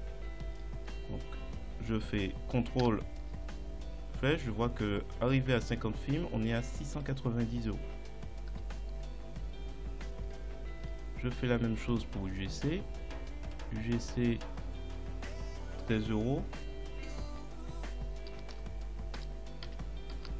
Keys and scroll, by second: 2.9 ctrl+Down, 8.5 ctrl+Up, 18.6 shift+u, 19.2 shift+g, 19.7 shift+c, 20.2 shift+space.